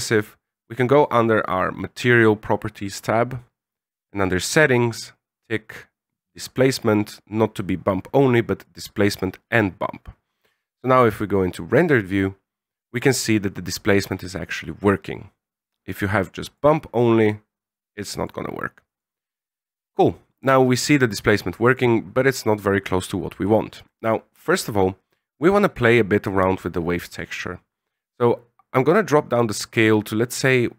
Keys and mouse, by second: 4.2 click, 6.5-8.7 drag, 11.5 drag, 15.9-16.6 drag, 18.2-19.0 drag, 21.9 click, 24.0 middle click, 25.6-29.6 drag.